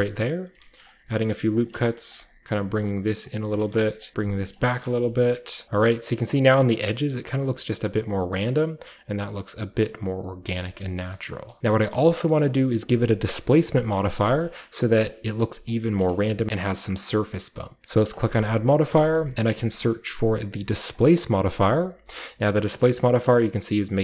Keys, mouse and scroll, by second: 0.5-6.6 typing, 0.9 click, 2.1 click, 3.2 click, 4.0 click, 4.5 click, 5.2 click, 5.6-6.5 middle drag, 5.6-6.5 scroll down 1, 6.7-7.1 middle drag, 7.3 middle drag, 7.6 middle click, 10.6 middle drag, 10.8-11.6 shift+middle drag, 10.8-11.3 shift+scroll up 1, 11.3-11.6 shift+scroll down 1, 11.6 Tab, 12.3-14.1 scroll up 1, 12.3 typing, 13.4 Tab, 14.1-15.7 typing, 14.1 click, 15.0 click, 15.7 click, 15.9 click, 16.1 Tab, 16.4-17.8 scroll up 1, 17.8 scroll up 1, 18.1 click, 20.9 click, 20.9 typing, 21.7-24.0 scroll down 1, 22.9-24.0 middle drag.